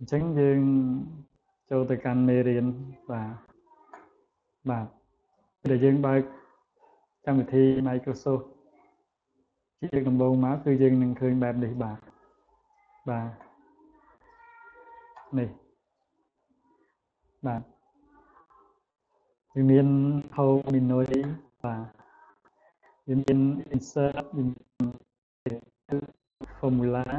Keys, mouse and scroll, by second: 1.9 click, 3.0 click, 14.5 click, 16.1 click, 21.7 click, 23.4 click, 24.6 click, 26.0 click.